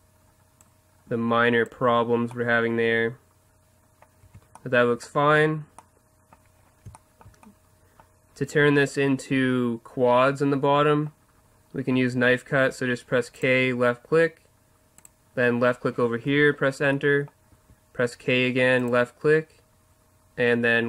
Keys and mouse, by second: 1.5-2.4 drag, 1.8 Tab, 2.4-3.3 middle drag, 4.2 Tab, 12.0 k, 17.5 k.